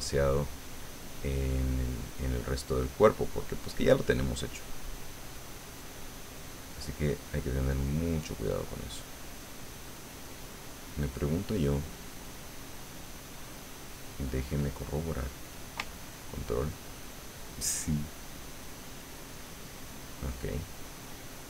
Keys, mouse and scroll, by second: 1.5 middle click, 2.5-3.6 middle drag, 3.9 middle click, 4.9-7.5 drag, 7.5 middle click, 8.5 middle click, 9.4-10.5 middle drag, 10.8 middle click, 12.1-15.3 drag, 16.1-17.8 ctrl+drag, 18.0-19.0 ctrl+drag, 19.5 ctrl+click, 20.7-21.4 ctrl+drag.